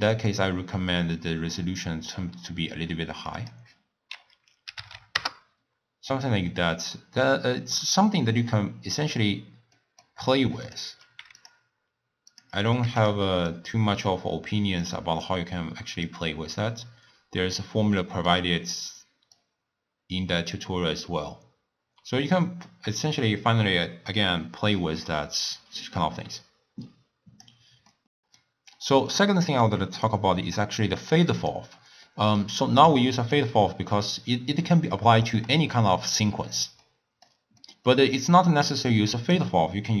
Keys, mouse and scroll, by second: 0.9-4.9 drag, 4.9 0, 6.1-7.2 middle drag, 7.2-7.6 scroll up 1, 7.6-8.9 middle drag, 8.9 scroll down 1, 9.8 middle click, 10.7 click, 12.4 click, 13.5-18.0 drag, 18.0-19.4 middle drag, 19.4-22.4 drag, 27.9-30.1 middle drag, 30.1 click, 32.1-32.9 middle drag, 32.9-33.9 drag, 33.9-38.5 middle drag, 38.5-40.0 drag.